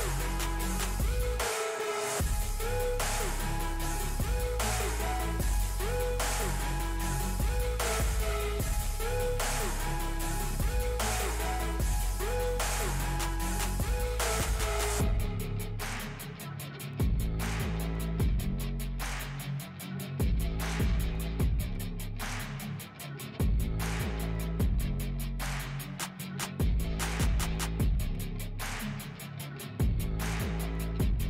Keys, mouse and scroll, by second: 0.6 ctrl+d, 1.3-3.3 drag, 3.3 Delete, 4.0 scroll down 1, 5.2 F4, 6.1 alt+click, 7.3 Delete, 8.0 alt+click, 9.1 Delete, 10.8-11.8 alt+drag, 11.8 Delete, 13.9 click, 14.4 Delete, 15.6 click, 16.8-17.1 scroll up 1, 17.1-19.8 drag, 20.5 scroll down 1, 21.1 F4, 22.5-28.0 drag, 28.0 scroll up 1, 28.6-30.6 drag, 30.6 ctrl+z.